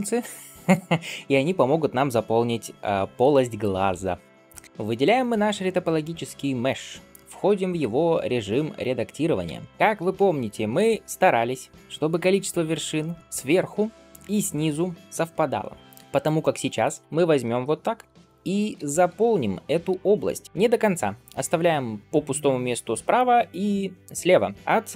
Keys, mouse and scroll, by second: 4.6 click, 8.0-9.3 scroll up 1, 9.3 Tab, 16.1 click, 17.9 f, 18.6 f, 19.8 f, 20.4 click, 20.4 f.